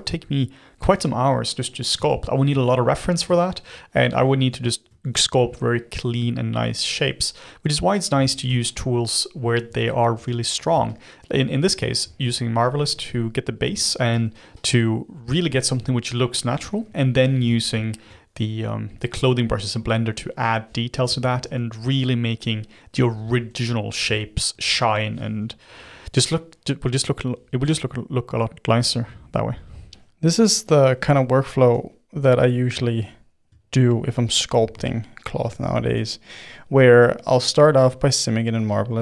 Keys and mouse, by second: 0.5 middle click, 1.2 click, 1.7 middle click, 2.1 ctrl+click, 2.5 middle click, 3.4 ctrl+click, 4.2 middle click, 5.1-8.2 ctrl+drag, 8.2 middle click, 8.7-10.1 ctrl+drag, 10.1 f, 10.9-13.1 shift+drag, 13.1 middle click, 13.9-15.6 shift+drag, 15.6-18.3 middle drag, 18.3 f, 19.5 click, 20.2-21.4 middle drag, 21.4 f, 22.1 click, 23.0 middle click, 23.4 f, 24.1-25.3 shift+middle drag, 25.3 f, 26.0-31.6 drag, 31.6 f, 32.1 click, 33.0 middle click, 33.6-35.5 shift+drag, 35.5 middle click, 35.8 f, 36.9 f, 37.5-39.0 drag.